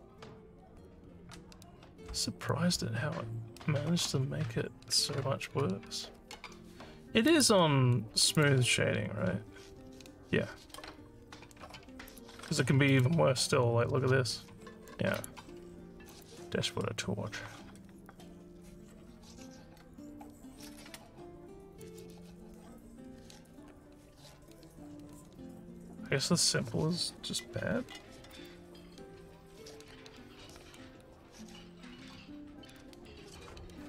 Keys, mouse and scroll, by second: 7.3 right click, 8.3 click, 12.1 right click, 12.9 click, 15.1 right click, 16.1 click, 21.8 click, 28.3 click.